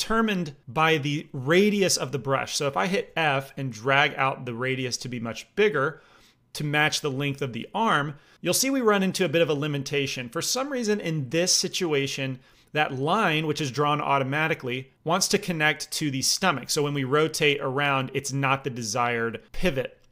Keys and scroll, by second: 2.9 f.